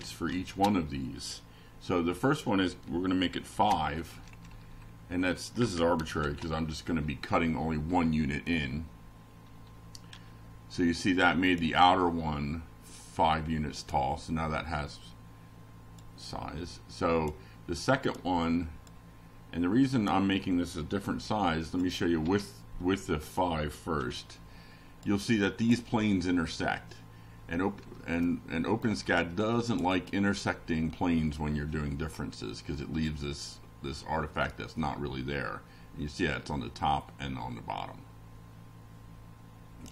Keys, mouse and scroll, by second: 1.2 F5, 2.2-3.0 drag, 5.1 shift+middle click, 6.0 shift+click, 9.6-16.0 drag, 17.8 click, 20.0 click, 21.0 BackSpace, 21.3 6, 22.4 F5, 23.0 click, 26.6 click, 31.8 click, 32.9 click, 34.2 click, 35.0 click, 36.1 click, 37.8 ctrl+c, 38.6 click, 39.4 ctrl+v.